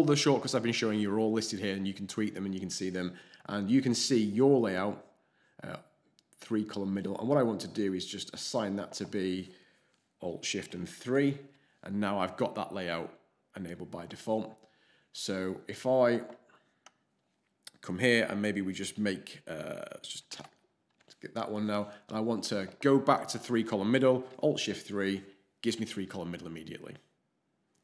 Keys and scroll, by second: 11.0 alt+shift+3, 20.3 alt+shift+space, 24.5 alt+shift+3.